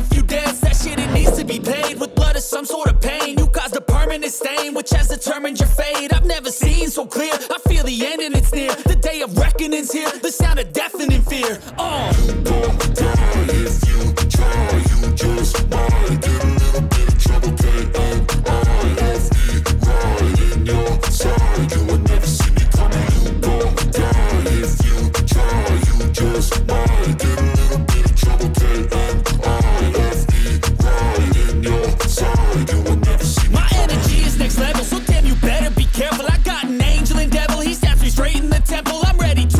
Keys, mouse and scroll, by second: 3.2 shift+Page_Up, 3.9 ctrl+g, 4.3-4.7 scroll up 1, 4.7 click, 5.9 scroll down 1, 6.5 scroll up 1, 6.8 shift+click, 7.1 c, 7.4 click, 9.4 ctrl+z, 10.0-11.6 shift+drag, 11.6 ctrl+z, 12.1-12.4 scroll down 1, 12.4 click, 13.3 scroll up 1, 13.9 click, 15.1 shift+click, 15.5 scroll up 1, 15.9 shift+click, 16.5 scroll down 1, 17.2 ctrl+g, 17.7 click, 19.3 ctrl+click, 20.4 ctrl+right click, 21.0 scroll up 1, 21.5-22.7 drag, 22.7 shift+Page_Down, 23.6-25.2 drag, 25.2-26.5 drag, 26.8 scroll down 1, 27.5 click, 27.9 scroll up 1, 29.1-31.4 shift+drag, 31.4-33.1 drag, 33.1 click, 34.3 shift+click, 34.9 ctrl+g, 35.9-38.8 drag, 38.8-39.5 drag.